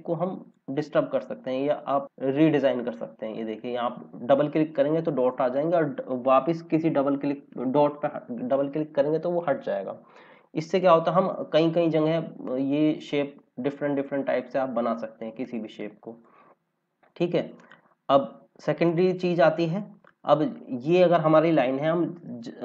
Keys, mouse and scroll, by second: 10.7 click.